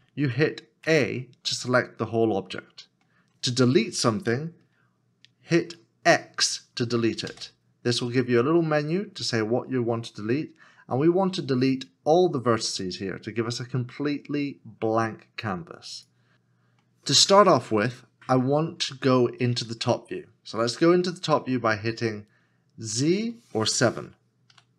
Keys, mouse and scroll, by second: 0.8 a, 1.8 middle click, 7.3 x, 16.3 middle click, 24.5 KP_7.